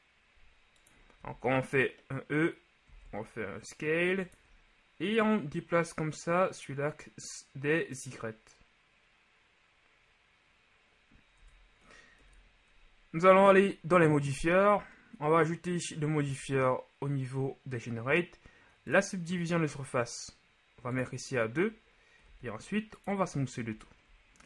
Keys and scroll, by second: 1.2 shift+e, 3.0 s, 11.4 Tab, 12.2 KP_1, 22.3 w.